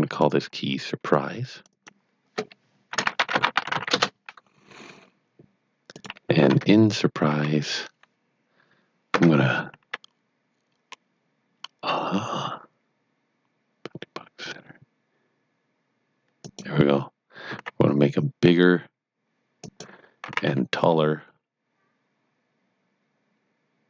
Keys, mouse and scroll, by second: 0.3 double click, 1.5 click, 1.6 double click, 2.6-4.2 typing, 5.9 click, 6.5 Tab, 7.3 a, 16.3 click, 17.5 s, 19.5 click, 20.2 s, 22.3-23.0 typing.